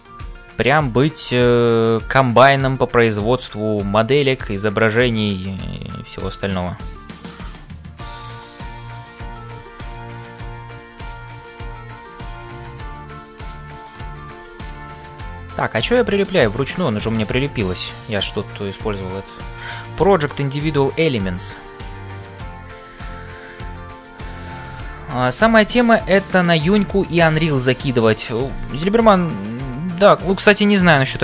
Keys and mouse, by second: 0.0-31.2 typing, 0.6 click, 2.4 click, 5.4 click, 6.9 click, 13.0 shift+middle click, 14.7-16.8 middle drag, 18.8 shift+middle click, 19.2 middle click, 19.8 click, 20.3 middle click, 28.8 middle click, 30.1 middle click.